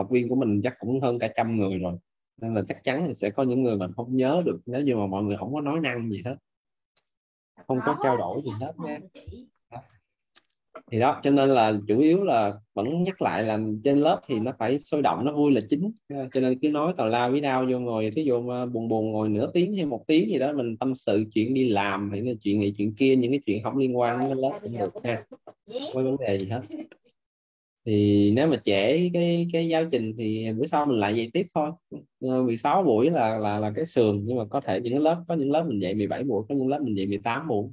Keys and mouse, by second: 28.2 click, 32.0 click, 35.0 click.